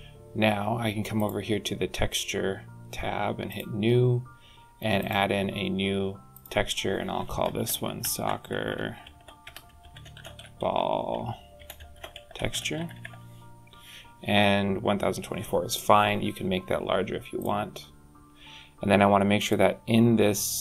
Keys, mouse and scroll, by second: 1.0 click, 3.4 click, 4.9 click, 8.0 c, 10.6 l, 19.2 click.